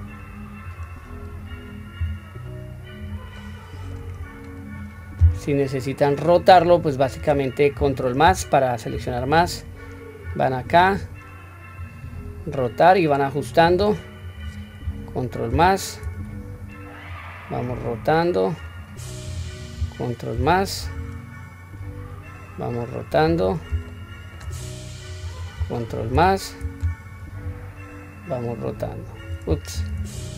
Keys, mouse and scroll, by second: 1.4 click, 2.0 s, 3.4-3.9 middle drag, 4.2 scroll up 1, 5.7-6.3 middle drag, 6.7-7.1 middle drag, 8.2 ctrl+KP_Add, 10.2 click, 11.8-13.7 drag, 14.2 click, 15.5 ctrl+KP_Add, 17.0-18.6 drag, 19.3 click, 20.3 ctrl+KP_Add, 21.8 click, 22.0-23.3 drag, 23.8 shift+middle click, 25.0 click, 26.1 ctrl+KP_Add, 27.5-29.3 drag, 29.7 ctrl+z.